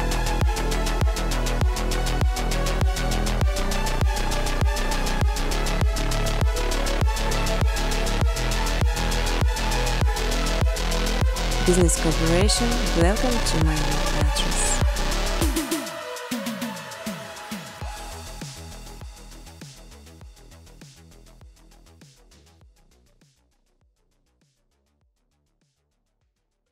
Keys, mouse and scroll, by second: 1.0 space, 1.3 scroll, 1.3 middle click, 1.4 middle click, 1.6 middle click, 1.7 middle click, 2.2 click, 2.6 click, 3.0 click, 3.1 right click, 4.7 click, 5.7 scroll, 5.9 click, 6.8-8.0 typing, 9.8 click, 10.0 click, 11.8 click, 12.9-13.6 typing, 14.3 Tab, 15.2-15.9 typing, 16.3 Tab, 17.2-19.3 typing, 18.9 click, 22.6 space, 22.8 space, 24.3-26.7 typing.